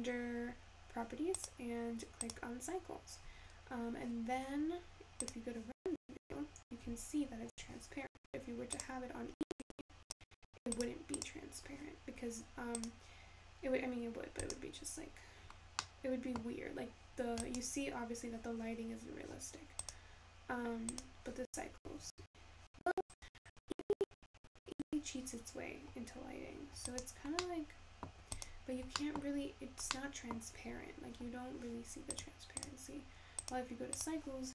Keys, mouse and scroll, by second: 1.5 click, 7.1-8.8 scroll down 2, 8.8-10.6 scroll down 2, 11.5 click, 30.9-34.5 scroll down 3.